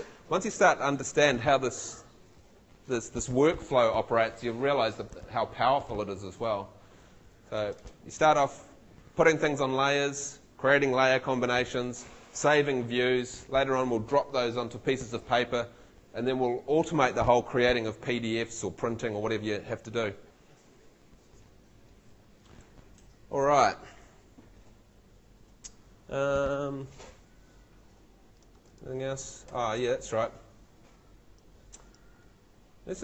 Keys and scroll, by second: 29.4 shift+F2.